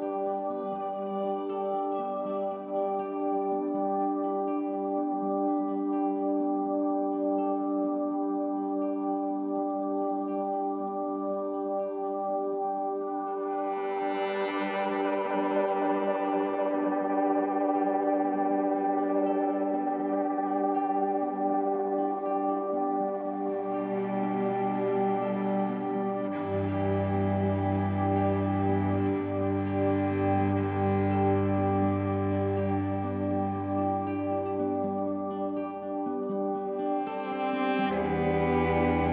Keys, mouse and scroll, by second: 0.0-2.2 middle drag, 2.2 click, 3.5 click, 12.0-18.3 middle drag, 18.3-20.0 drag, 20.0 KP_0, 22.9 click, 24.1 click, 27.7 middle click, 28.5 click, 29.0 click, 30.6-33.7 drag, 35.3-36.8 drag, 36.8 scroll up 2, 38.0 click.